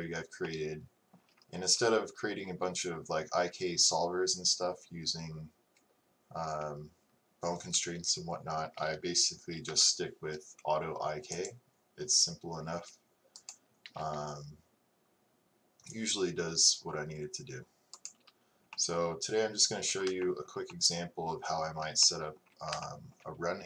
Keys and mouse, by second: 9.7 t, 20.8 middle click, 21.0 middle click.